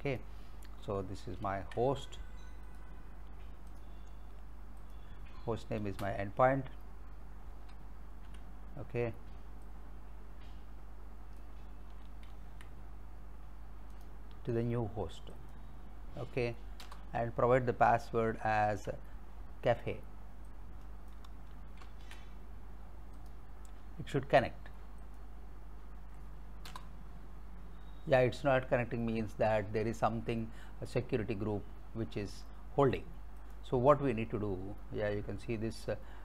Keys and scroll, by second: 1.4 ctrl+c, 5.9 space, 7.7 alt+Tab, 12.3 ctrl+c, 16.8 Return, 18.4 alt+Tab, 21.8 ctrl+c, 26.7 Return.